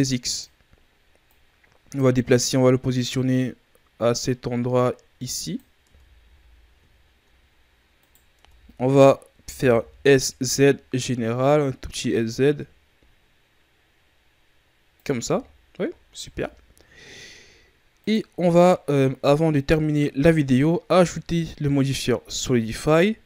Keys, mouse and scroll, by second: 1.2 click, 5.8 Tab, 6.1 a, 6.5-7.0 scroll down 1, 7.0-7.9 shift+scroll up 3, 7.9 right click, 8.3 Tab, 9.3 s, 15.2 Tab, 15.4-15.8 scroll down 2, 15.8-16.1 shift+scroll up 2, 16.1 a, 16.4-17.9 scroll up 2, 17.9-18.2 right drag, 18.2 scroll down 2, 18.4-19.2 middle drag, 19.2-19.8 ctrl+scroll up 5, 20.5-21.3 middle drag, 21.3-22.7 scroll up 2, 22.7 click.